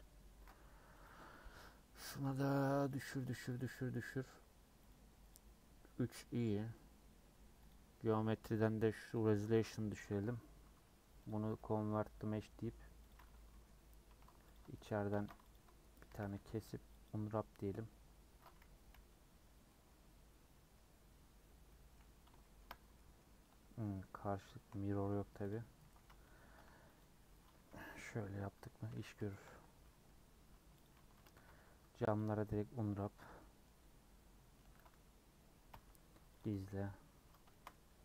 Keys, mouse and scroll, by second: 2.2-13.1 drag, 3.0 Left, 3.1 Left, 13.1 right click, 13.3 Tab, 13.5 middle click, 13.7 scroll up 3, 14.1 2, 14.5 alt+click, 15.1 ctrl+z, 15.5 alt+Left, 16.1 a, 17.1 u, 18.9 /, 19.7 middle click, 20.0 /, 20.5 middle click, 20.7-21.2 scroll down 5, 21.7 middle click, 22.1 scroll down 1, 22.4-23.5 shift+middle drag, 23.5-25.0 scroll up 8, 23.8 middle click, 24.5 shift+middle click, 25.5 alt+click, 25.9 a, 27.0 u, 27.9 /, 28.9 /, 29.2 Tab, 29.4-30.8 scroll down 7, 29.8 middle click, 30.8 click, 31.1 Tab, 31.3 a, 32.1 u, 32.4 middle click, 33.2 Tab, 33.3 middle click, 33.8 Tab, 34.6 Tab, 35.7 h, 36.3 Left, 36.5 Tab, 37.1 Tab, 37.5 shift+middle click, 37.7 scroll up 1, 37.9 Tab.